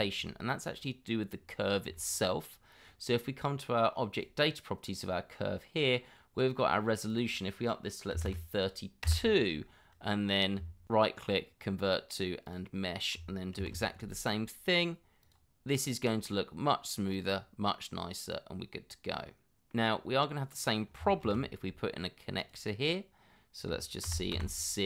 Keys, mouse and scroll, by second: 1.3-1.9 scroll down 1, 1.9 shift+middle click, 2.5 scroll up 1, 8.1 3, 8.2 2, 9.0 Return, 10.8 right click, 13.6 shift+2, 17.4 scroll down 1, 17.7 middle click, 19.9-20.6 scroll up 1, 21.2 shift+2, 24.0 c.